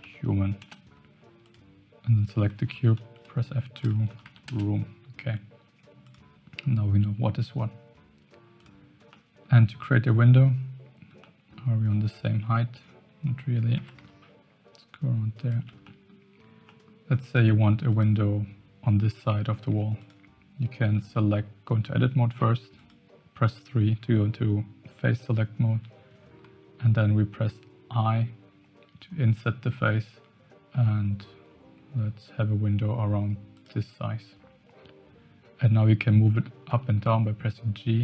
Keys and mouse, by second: 1.4 click, 2.7 F2, 4.0 o, 6.0 click, 8.5 click, 9.1-9.4 middle drag, 11.2 middle click, 12.1 KP_1, 13.7 g, 15.8-16.1 middle drag, 16.6 middle click, 17.3 click, 19.7 Tab, 19.9 click, 21.0 3, 22.7 click, 36.6 g.